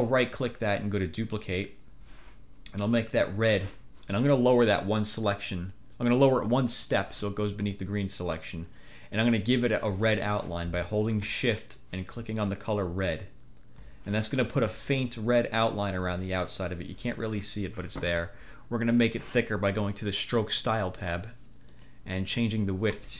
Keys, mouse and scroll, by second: 0.1 click, 1.2 click, 3.2 click, 6.9 click, 12.9 shift+click, 20.6 click, 21.8 click, 22.7 click.